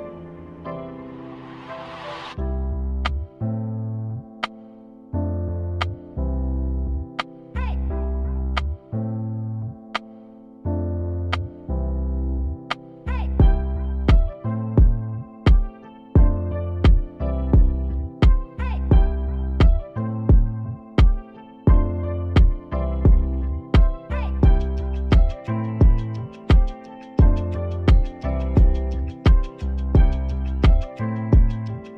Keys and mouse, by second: 1.3-2.5 drag, 1.8-3.4 right drag, 3.4 x, 5.3-7.2 drag, 6.1-9.3 right drag, 7.2 alt+m, 9.5 alt+m, 15.4-16.5 right drag, 15.5 alt+m, 16.5 ctrl+z, 17.8 alt+m, 27.2-28.3 drag, 28.3 right click, 29.0 shift+s, 29.8 s, 31.8 e.